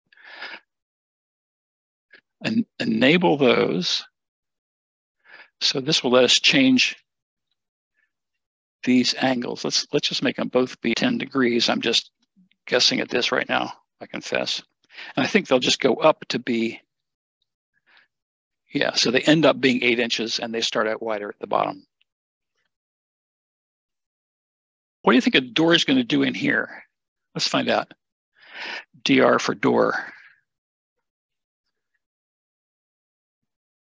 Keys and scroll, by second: 10.9 1, 17.5 typing, 28.9-29.3 typing.